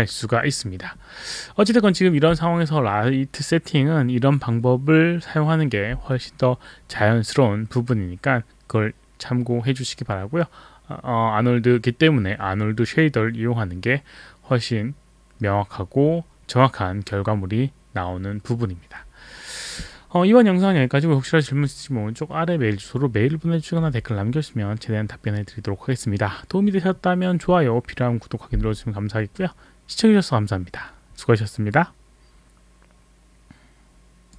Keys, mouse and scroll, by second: 34.3 click.